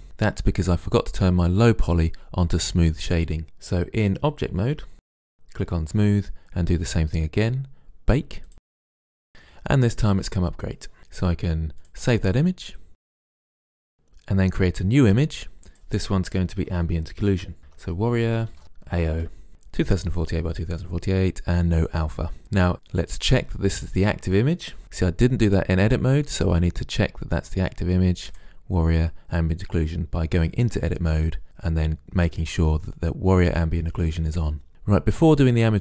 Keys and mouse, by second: 5.8-7.3 drag, 11.9-12.9 drag, 13.9-16.4 drag, 18.2 r, 24.8 Tab, 26.4-28.0 drag.